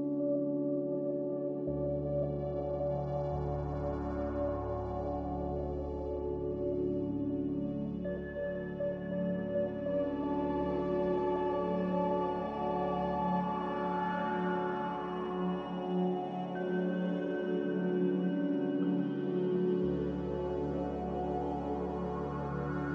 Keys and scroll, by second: 1.4-3.7 typing, 4.9-6.8 typing, 10.0 c, 16.4 z, 18.2-19.0 typing, 20.8-21.5 typing.